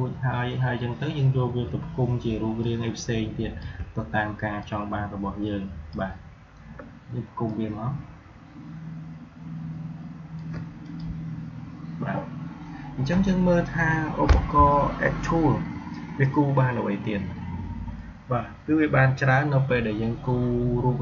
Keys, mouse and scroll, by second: 2.5-7.4 shift+drag, 7.4-10.7 alt+drag.